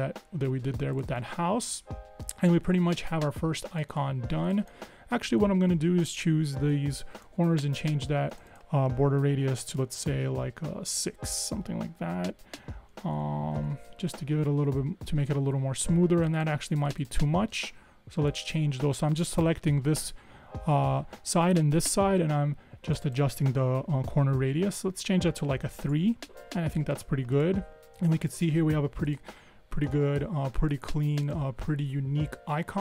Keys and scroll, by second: 11.2 6, 11.4 Tab, 13.1 Escape, 13.2 Escape, 13.6 Escape, 25.6 3, 25.9 Tab.